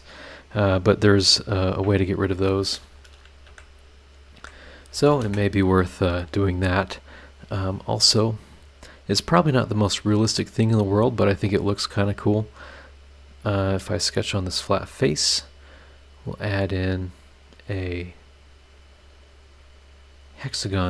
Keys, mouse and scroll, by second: 2.2 click, 3.5 Delete, 4.1 click, 4.4 Delete, 4.8 click, 5.2 space, 5.8 scroll down 2, 6.2 click, 7.9 click, 9.5 click, 12.4 click, 13.7 click, 14.3 scroll down 2, 14.8-15.1 scroll up 2, 15.3 scroll down 2, 16.7 click, 18.8 click, 20.6 click.